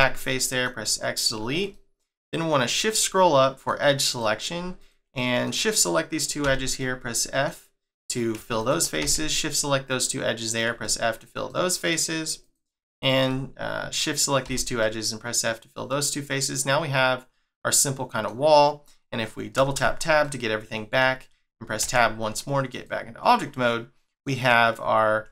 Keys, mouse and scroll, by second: 0.2 middle click, 0.8-1.7 scroll up 5, 1.7 middle click, 2.3 scroll up 2, 2.8 middle click, 4.0 click, 5.1 middle click, 5.8 middle click, 6.4 f, 6.7 middle click, 8.0 click, 8.5 shift+click, 9.0 f, 10.0 middle click, 12.4 click, 13.3 middle click, 14.4 f, 14.8 middle click, 20.2 middle click, 21.8 Tab, 22.7 click, 23.2 middle click, 24.4-24.9 scroll up 2.